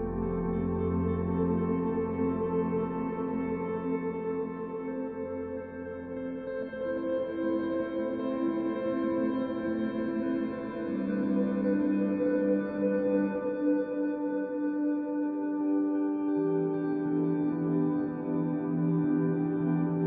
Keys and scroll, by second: 13.8 z, 16.9 b, 18.1 b, 19.1 f.